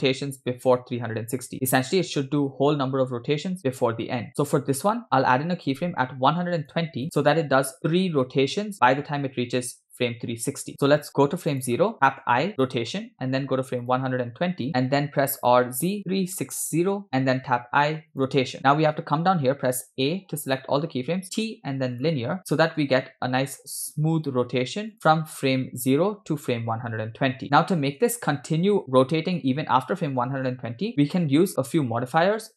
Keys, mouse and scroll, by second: 6.4 click, 7.1 click, 11.6 click, 12.3 i, 13.9 click, 15.4 r, 17.5 i, 19.5 a, 21.2 t, 22.8 space, 23.9 space, 24.9 click, 24.9 space, 30.3 space.